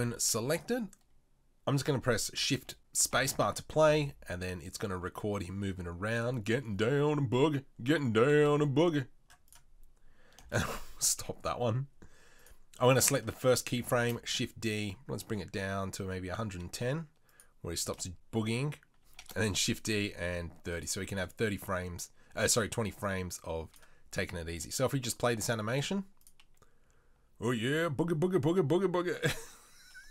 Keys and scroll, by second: 2.4 g, 3.1 shift+space, 3.9 g, 10.5 shift+space, 14.0 shift+d, 19.1 shift+d.